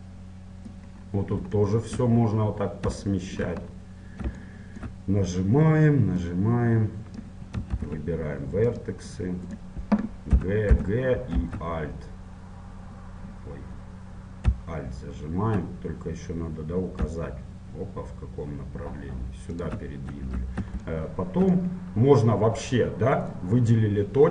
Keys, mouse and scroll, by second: 1.1-6.4 middle drag, 1.1-1.8 scroll down 1, 6.4-8.2 drag, 7.8 ctrl+Tab, 9.6-11.6 right drag, 10.4 g, 21.0-23.0 middle drag, 23.4-24.3 right drag.